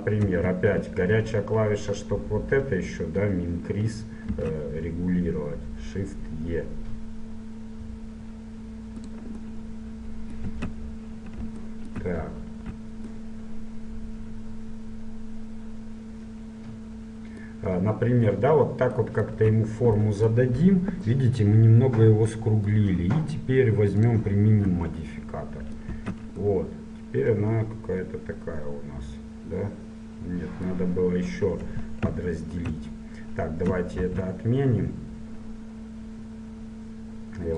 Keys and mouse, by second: 4.4 shift+e, 9.6-10.6 middle drag, 10.6 Tab, 12.6 z, 19.4 z, 24.1-26.0 drag, 26.2 Tab, 32.1 ctrl+z, 34.0 shift+e.